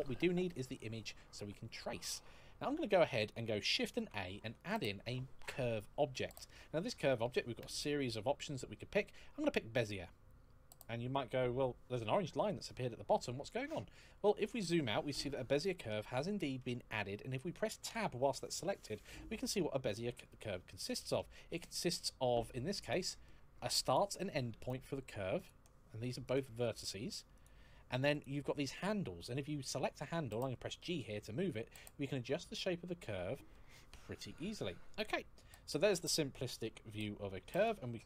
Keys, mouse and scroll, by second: 3.7 shift+a, 9.6 click, 13.7-14.4 scroll down 1, 14.9 middle click, 17.6 Tab, 20.0 middle click, 22.6 click, 24.3 click, 26.0 click, 27.9 click, 30.6 g, 37.3 click.